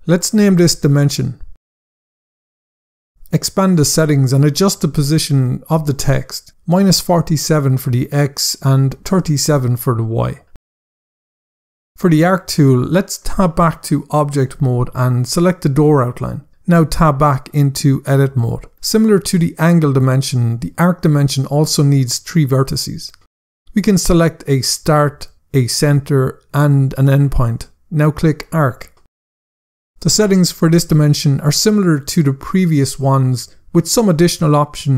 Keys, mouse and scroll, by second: 0.0 scroll down 1, 1.0 click, 1.9 typing, 2.4 Return, 3.5 click, 3.8 scroll down 1, 5.1 click, 6.2-8.9 typing, 7.6 Tab, 9.5 Return, 11.6 click, 13.5 Tab, 15.3 click, 16.6 Tab, 21.3 scroll up 1, 24.5 click, 25.3 shift+click, 28.2 click, 29.4 scroll down 1, 30.7 click, 31.4-32.0 typing, 32.3 Return, 33.8 click, 34.2 scroll down 1.